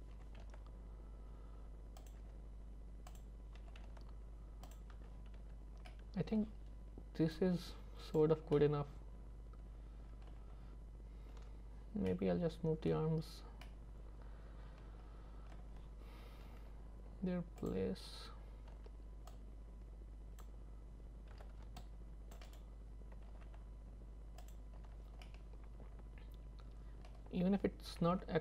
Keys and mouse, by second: 0.2 r, 2.2 g, 3.6 r, 5.0 Tab, 5.4 z, 5.9 middle click, 7.4 click, 8.6-10.4 middle drag, 11.4 Tab, 12.1 middle click, 13.7-15.6 middle drag, 18.7 z, 19.4-20.4 drag, 21.4 c, 23.3 g, 24.8 z, 25.3-27.1 middle drag, 27.9 g.